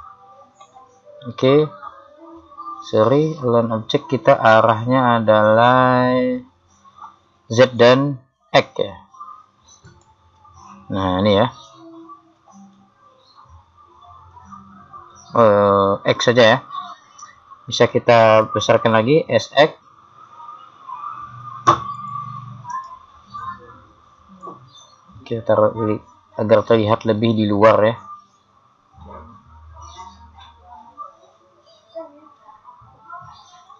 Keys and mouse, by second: 9.9 click, 19.3 s, 22.8-24.4 right drag, 24.4 click.